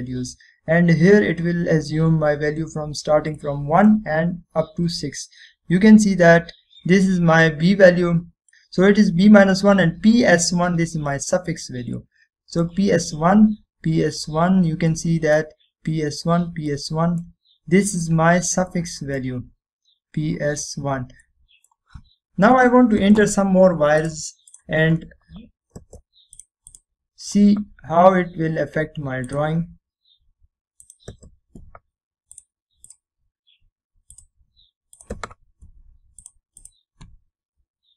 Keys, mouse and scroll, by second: 0.4 scroll up 1, 2.6-3.7 scroll down 1, 4.5-5.1 middle click, 5.0 scroll down 1, 6.0-6.5 scroll up 1, 9.7-10.9 scroll up 1, 12.6-13.1 scroll down 1, 13.4-14.0 middle click, 13.6-14.0 scroll down 1, 14.2-14.6 scroll up 1, 15.3-16.0 scroll down 1, 16.0-16.6 middle drag, 19.1-19.8 scroll down 1, 19.8-20.4 middle click, 20.0 scroll up 1, 21.4-22.3 scroll down 1, 22.3-22.9 middle drag, 25.7 click, 31.0 click.